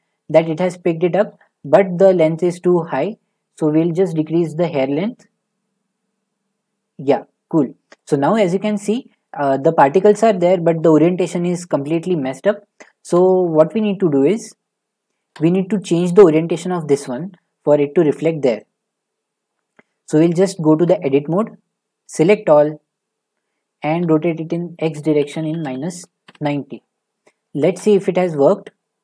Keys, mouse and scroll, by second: 0.8 scroll, 1.1 shift+middle click, 1.8-4.1 scroll, 7.9 click, 8.3-9.4 scroll, 9.4 scroll down 5, 9.7 shift+middle click, 10.4 scroll down 1, 11.2-12.5 scroll down 4, 12.8-13.6 scroll down 7, 13.0 shift+middle click, 13.6-14.5 scroll, 15.2 shift+middle click, 15.8 click, 20.8 Tab, 22.1 a, 24.0-26.3 typing, 27.7 shift+middle click, 27.9 middle click, 28.0 middle click, 28.2 middle click, 28.3 middle click, 28.8 middle click, 28.9 scroll.